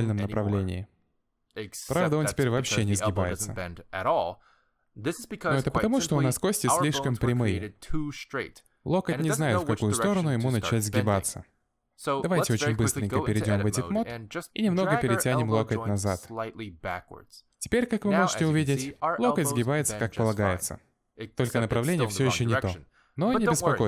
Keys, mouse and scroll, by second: 0.4 g, 3.4 g, 4.8-5.2 scroll down 2, 4.9 middle click, 6.6-7.2 scroll up 2, 8.3 middle click, 8.3 alt+g, 8.6 middle click, 9.9 Tab, 10.2 shift+middle click, 10.6-11.0 scroll up 3, 11.2 a, 11.4 scroll down 2, 11.6 middle click, 14.2 click, 14.6 middle click, 15.0-15.6 scroll up 2, 15.3 g, 17.0-17.6 scroll down 4, 17.1 middle click, 17.6 middle click, 17.8 Tab, 18.3 click, 18.5 middle click, 18.7 g, 21.1 middle click.